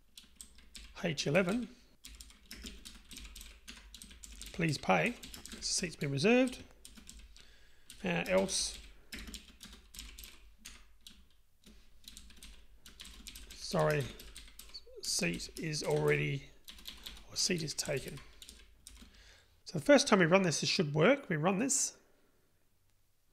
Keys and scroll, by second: 0.0 Return, 3.7 Tab, 10.8 Tab, 21.9 ctrl+r.